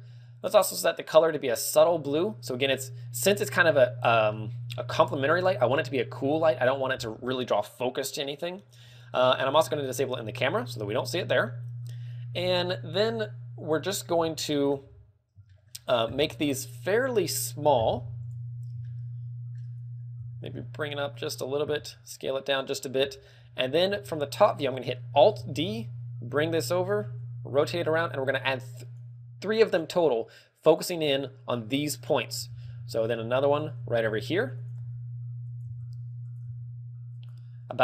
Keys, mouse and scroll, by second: 0.8 click, 2.1 click, 3.5 click, 4.6 shift+middle click, 5.3 scroll up 3, 8.9 click, 11.2 click, 12.9 scroll up 3, 18.5 click, 19.4 click, 19.4 shift+middle click, 20.5 g, 21.8 click, 21.9 s, 23.0 click, 23.3 KP_7, 24.6 shift+middle click, 25.9 alt+d, 27.2 click, 27.6 r, 28.0 r, 29.5 click, 33.0 alt+d, 34.0 click, 34.1 r, 35.4 click, 35.4 g, 35.9 click, 36.2 r, 36.6 click, 36.7 g.